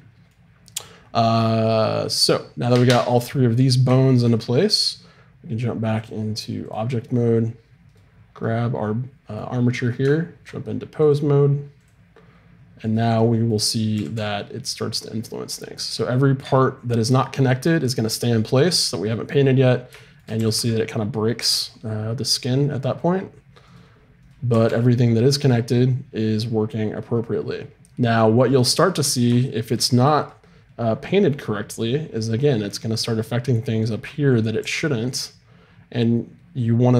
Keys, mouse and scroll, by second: 0.8 middle click, 6.0-9.7 drag, 7.8-9.7 right drag, 9.7 middle click, 11.0-14.5 drag, 12.8-14.7 right drag, 13.9 r, 20.3 r, 20.8-22.0 middle drag, 24.2 right click, 24.5 r, 25.0 middle click, 26.0 middle click, 27.2 middle click, 28.9-29.4 scroll up 1, 30.2-31.4 drag, 30.2-34.6 right drag, 34.6 r.